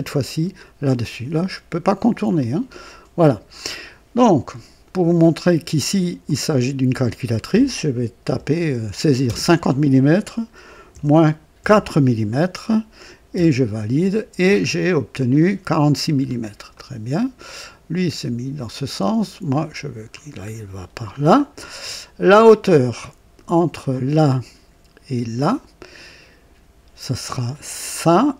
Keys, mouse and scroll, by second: 2.3 click, 6.2-7.3 drag, 8.2 KP_5, 9.2 KP_0, 10.8 KP_Subtract, 11.5 typing, 13.3 typing, 14.4-14.8 scroll down 1, 16.1-16.5 scroll down 1, 16.7 right click, 18.5-20.2 drag, 20.4 scroll up 1, 21.1 scroll down 1, 23.8 click.